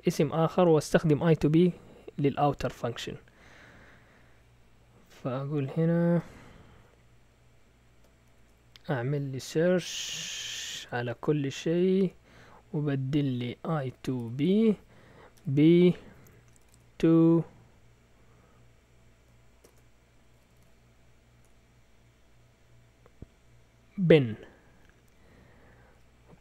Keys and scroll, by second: 10.9-12.0 typing, 13.4-15.3 typing, 16.4-17.2 typing, 20.1-21.0 typing.